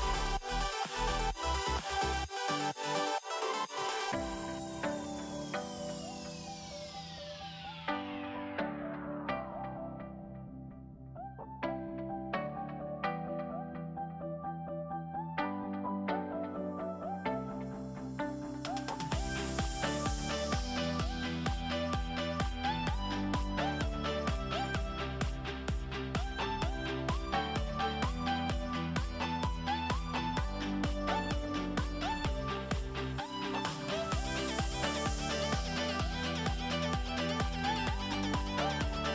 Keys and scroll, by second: 5.8 -, 10.1 a, 11.4 n, 12.8-14.4 typing, 15.4-19.6 typing, 21.0 -, 22.4 -, 22.5 -, 25.0 -, 28.9 a, 31.3 a.